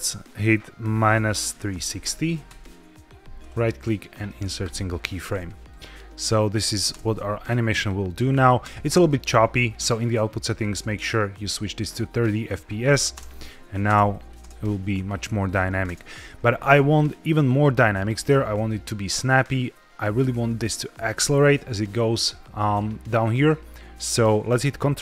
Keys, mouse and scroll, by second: 3.3-4.7 right drag, 5.6-6.7 drag, 6.8 space, 8.5 space, 10.4-12.3 drag, 13.0 space, 13.8 space, 14.0 drag, 14.3 space, 15.8 space, 17.2-18.8 drag.